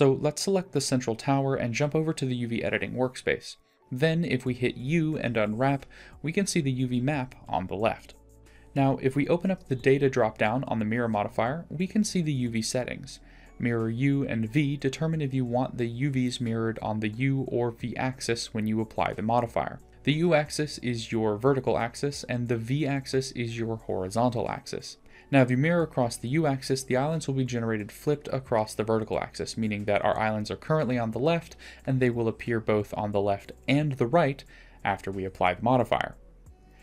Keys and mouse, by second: 1.7-4.1 drag, 4.1 u, 9.7 middle drag, 11.4 middle drag, 11.6 click, 11.7-12.4 middle drag, 12.4 click, 18.2-20.3 drag, 19.9-24.1 d, 20.6 click, 23.9 click, 30.9 Tab, 32.5-33.4 drag, 34.4 Tab, 36.6 middle click.